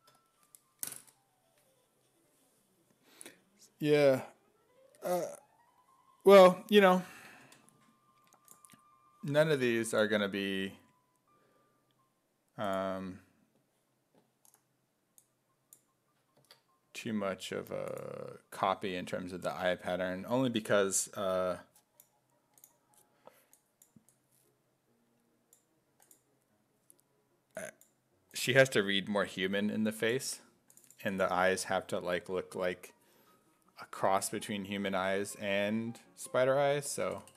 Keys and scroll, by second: 16.4 alt+Tab, 36.9 BackSpace, 37.2 BackSpace.